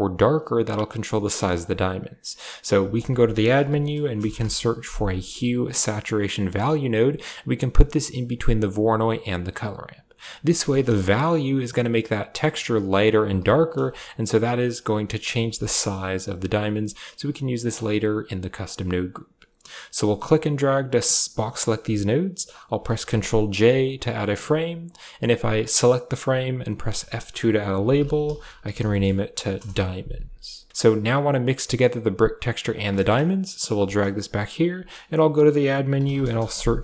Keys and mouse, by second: 1.4 click, 2.8 shift+a, 8.8 click, 9.3 click, 9.8 click, 10.8-13.0 shift+drag, 13.4 ctrl+shift+click, 13.9-15.1 drag, 15.4 ctrl+shift+click, 16.1-17.5 shift+drag, 18.1 click, 18.5 click, 20.0 click, 20.1-20.7 drag, 21.2 click, 22.8 ctrl+j, 23.5 a, 23.7 click, 24.1 click, 24.7 click, 25.4 click, 26.1 click, 26.6 F2, 29.9 a, 30.7 click, 31.6 ctrl+shift+click, 32.5 ctrl+shift+click, 32.8 click, 33.1 click, 33.5 g, 34.8 shift+a.